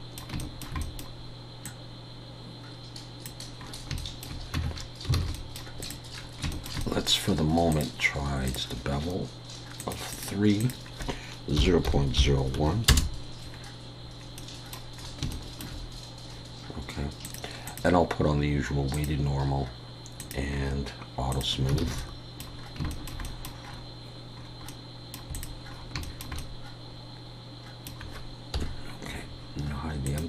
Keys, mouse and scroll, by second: 0.4 shift+middle click, 0.8 middle click, 1.6 click, 3.7 scroll up 4, 4.0 shift+middle click, 4.6 Tab, 4.7-5.3 scroll down 5, 5.2 alt+a, 5.3 middle click, 5.8 click, 6.1 scroll down 1, 6.5 shift+middle click, 6.8 scroll up 1, 6.8 middle click, 7.7 click, 9.8 click, 14.4 middle click, 15.0-15.3 scroll up 3, 15.3 shift+middle click, 17.2 click, 18.1 click, 20.5 click, 20.5 scroll down 1, 21.3 click, 21.3-21.7 scroll down 2, 21.8 alt+a, 22.0 middle click, 22.6 scroll down 2, 22.9 shift+middle click, 23.2 middle click, 23.7 scroll up 2, 24.4-24.9 scroll up 4, 24.7 middle click, 25.3 click, 25.7 scroll up 1, 26.0 shift+middle click, 26.4 middle click, 28.6 KP_1, 30.1 click.